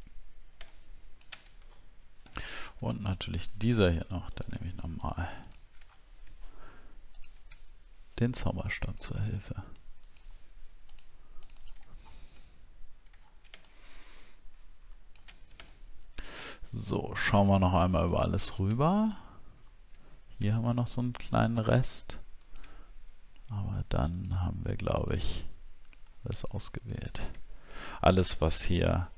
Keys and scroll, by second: 1.8-2.1 alt+scroll up 1, 5.8 alt+scroll up 1, 11.9 alt+scroll down 1, 13.1-13.7 alt+scroll down 1, 18.7 alt+scroll up 1, 19.5 alt+scroll up 1, 20.5 alt+scroll up 1, 27.4 alt+scroll down 1.